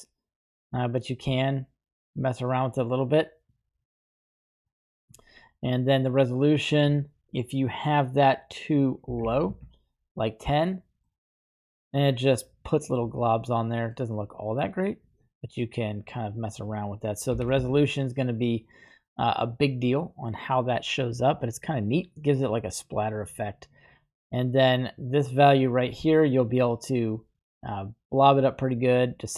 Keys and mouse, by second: 6.6-9.6 drag, 11.1-13.1 middle drag, 16.3-17.7 drag, 18.9-20.4 middle drag, 24.5-29.3 drag, 27.6-29.3 shift+middle drag.